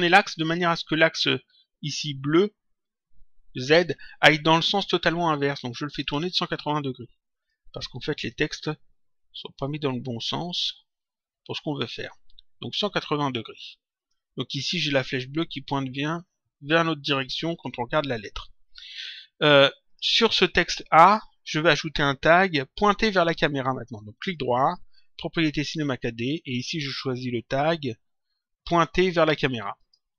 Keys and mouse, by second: 6.0 click, 7.4 click, 11.0 shift+click, 13.9 click, 17.1 click, 19.8 click, 24.1 right click, 29.7 click.